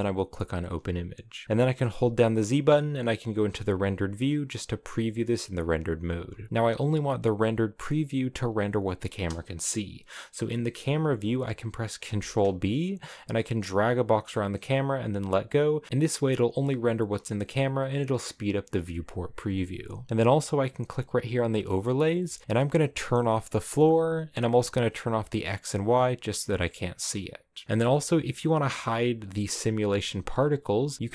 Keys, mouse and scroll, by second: 0.0-3.9 drag, 3.9 z, 6.2 scroll down 1, 6.5-7.1 scroll up 4, 9.9 scroll down 1, 15.0 ctrl+b, 15.9 ctrl+b, 17.0 scroll up 1, 17.0-17.4 scroll down 3, 18.0 scroll up 3, 22.9-25.5 drag, 27.9-28.3 scroll up 4, 29.5 right click, 30.2 scroll down 3.